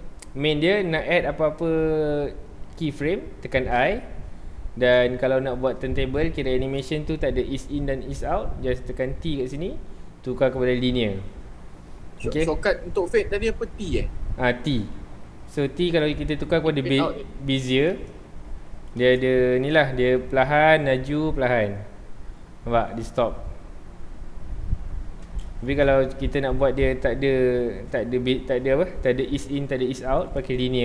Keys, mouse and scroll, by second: 1.2-2.6 middle drag, 2.6-2.9 scroll down 1, 9.2 t, 14.8 t, 19.0 space, 19.1 space, 25.2 space, 26.8 t.